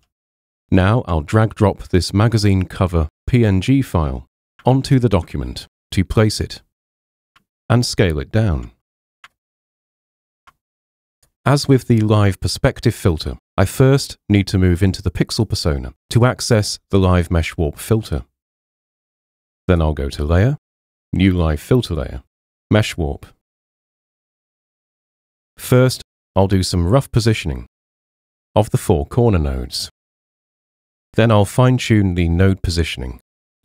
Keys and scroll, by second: 1.0 super+Tab, 4.7 super+Tab, 5.5 super+Tab, 12.0 super+0.